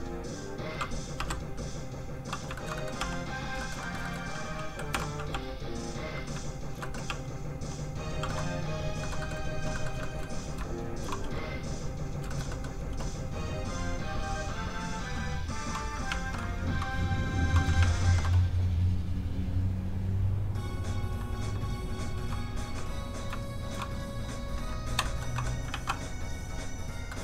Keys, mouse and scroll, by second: 1.2 i, 1.6 click, 2.6 shift+middle click, 2.8 middle click, 2.9 middle click, 3.0 f, 3.1 click, 3.6 shift+middle click, 3.8 middle click, 3.9 middle click, 4.1 shift+middle click, 5.0 shift+k, 5.3 f, 5.5 click, 6.4 shift+click, 6.6 shift+click, 6.8 middle click, 7.1 shift+f, 7.2 click, 7.4 click, 8.3 shift+middle click, 9.1 shift+middle click, 9.2 middle click, 10.0 shift+middle click, 10.7 shift+click, 11.3 f, 11.5 click, 12.3 shift+middle click, 12.5 middle click, 12.6 middle click, 13.7 click, 16.1 ctrl+Tab, 19.9 Tab, 20.8 click, 22.5 click, 23.4 shift+click, 23.9 click, 24.0 click, 25.1 shift+middle click, 25.4 middle click, 25.7 ctrl+d, 26.5 click, 27.1 shift+middle click.